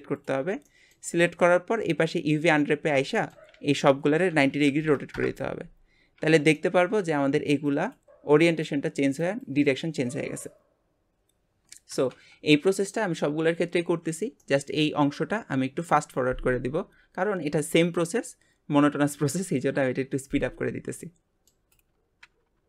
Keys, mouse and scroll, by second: 0.7-3.5 shift+middle drag, 6.5 middle click, 14.5-21.7 middle drag, 21.7 click.